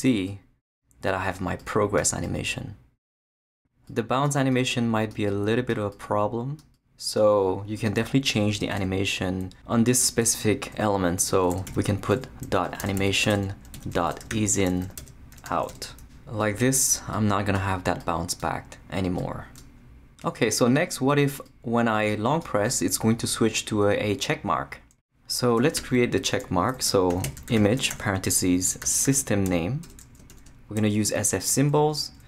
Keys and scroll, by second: 8.3 Return, 11.2 Tab, 11.7-15.9 typing, 25.6 Return, 26.8-30.3 typing, 32.0-32.2 typing.